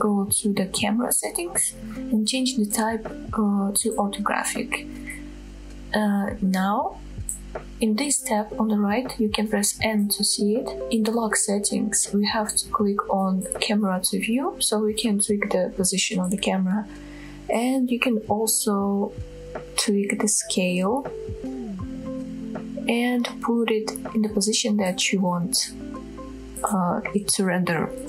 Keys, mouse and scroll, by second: 1.7 click, 3.1-4.5 drag, 5.4-7.1 scroll down 2, 7.6-9.3 typing, 10.5 click, 12.9-13.4 scroll down 1, 13.7-14.8 shift+middle drag, 16.0-16.4 shift+middle drag, 17.5 shift+middle click, 18.4 middle click, 18.9-19.4 shift+middle drag, 20.1-20.8 shift+middle drag, 21.7-23.6 drag, 24.5-25.6 shift+drag, 25.9 shift+middle click.